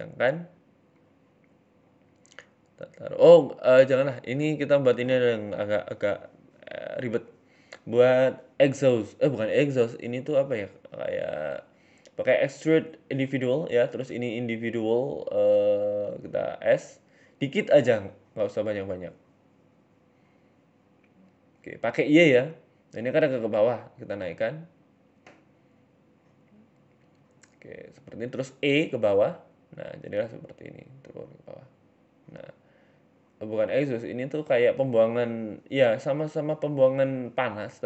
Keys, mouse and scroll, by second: 0.9 Tab, 1.6 ctrl+r, 3.8 ctrl+r, 5.3 a, 5.6 w, 6.3 w, 6.9 w, 8.1 middle click, 9.2 click, 10.6 click, 11.5 shift+middle click, 12.4 click, 13.7 scroll up 1, 13.9 s, 16.1 KP_7, 16.4-17.7 scroll up 6, 16.6 shift+middle click, 17.2 s, 18.6 s, 21.2 middle click, 22.7 shift+middle click, 23.2 g, 24.3 KP_1, 24.7 scroll up 2, 24.9 shift+middle click, 25.2 g, 27.1 e, 28.7 scroll down 5, 28.8 Tab, 29.0 middle click, 29.4 middle click, 29.6 Tab, 30.0 g, 31.0 Tab, 31.2-31.6 scroll down 4, 31.3 middle click, 31.6 Tab, 31.8 Tab, 32.0 right click, 32.1 right click, 32.4 a, 32.7 a, 32.8 a, 33.4 middle click, 33.7 middle click, 34.3 KP_7, 34.6-35.0 scroll down 4, 34.8 shift+middle click, 35.0 scroll up 2, 35.6 click, 35.6-36.3 scroll up 1, 37.4 g, 37.6 y.